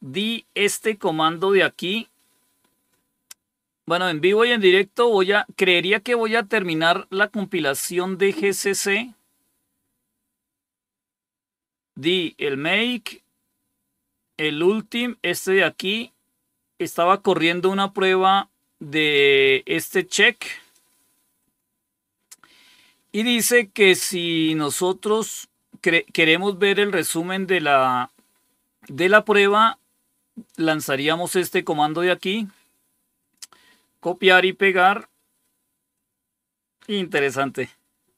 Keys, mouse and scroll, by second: 3.7 click, 8.2 scroll down 2, 8.8 scroll down 2, 9.8 scroll down 6, 10.8-11.4 scroll down 5, 15.6 scroll down 2, 19.3-20.6 drag, 21.3 click, 22.3 scroll down 2, 29.3-31.5 drag, 32.1 right click, 33.1 click, 34.7 right click, 35.8 click, 37.0 Return.